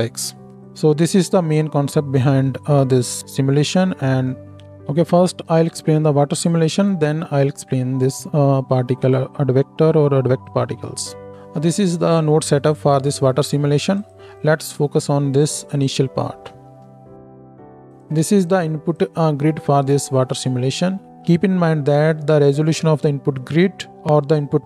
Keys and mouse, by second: 0.5 click, 0.6-4.6 middle drag, 4.6-14.1 drag, 14.1 middle click, 14.4-16.8 drag, 16.8 ctrl+x, 16.8-17.9 ctrl+shift+middle drag, 17.9 ctrl+shift+click, 18.0-18.4 ctrl+shift+middle drag, 18.4-24.6 drag.